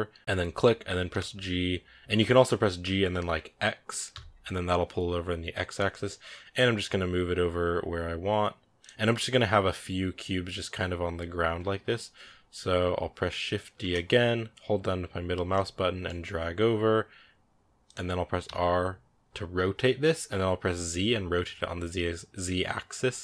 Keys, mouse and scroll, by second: 0.9 g, 13.6 shift+d, 18.3 r.